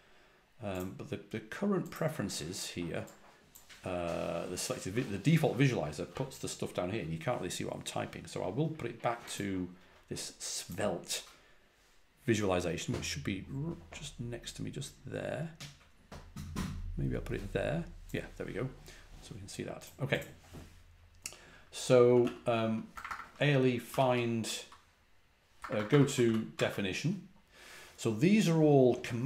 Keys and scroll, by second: 21.8-26.9 typing.